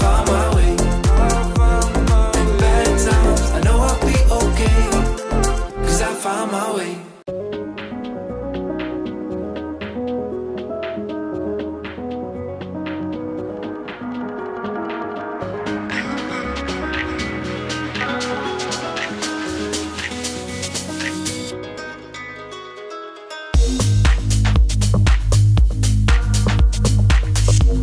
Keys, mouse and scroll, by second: 7.7-10.6 typing, 10.3 click, 13.0-18.3 drag, 18.3 click, 18.4-20.4 drag, 21.0 0, 21.3 Return, 23.1-27.8 drag.